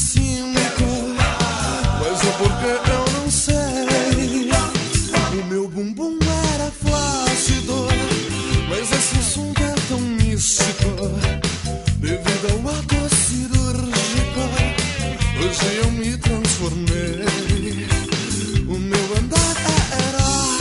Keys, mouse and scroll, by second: 0.3 click, 0.7 click, 1.6 click, 5.2 middle click, 7.1 shift+a, 9.0 middle click, 10.7 click, 12.1 click, 13.6 click, 15.3 middle click, 17.7 click, 18.8 KP_0, 20.5 click.